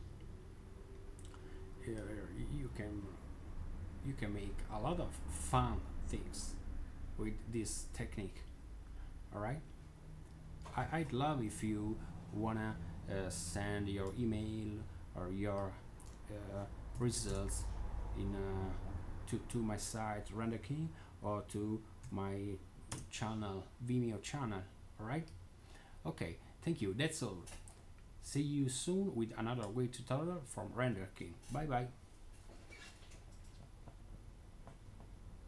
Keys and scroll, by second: 1.5-2.2 typing, 16.8 typing, 17.2 Tab, 21.9 typing, 22.8 Tab.